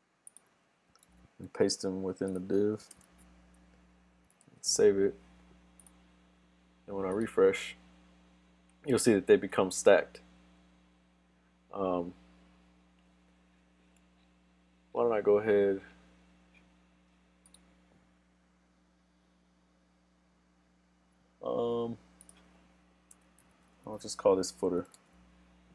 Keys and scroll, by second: 4.5 super+s, 25.0 super+s.